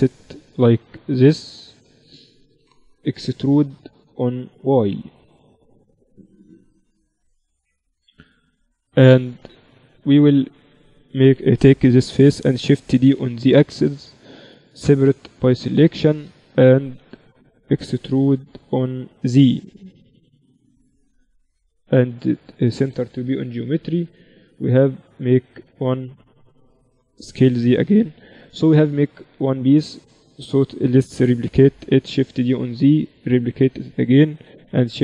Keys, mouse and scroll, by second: 2.8 KP_7, 4.0 e, 5.0 z, 5.8-7.2 drag, 7.9-10.8 middle drag, 8.0 z, 10.6 right click, 10.8-12.8 drag, 12.8 shift+d, 14.6 p, 15.5 Tab, 15.7-17.6 drag, 16.0 Tab, 16.8 a, 17.6 e, 20.0 Tab, 21.3 ctrl+alt+shift+c, 23.0 KP_1, 23.6 z, 23.8-26.3 middle drag, 27.2 s, 28.9-30.8 drag, 30.8 shift+d, 34.5 shift+d.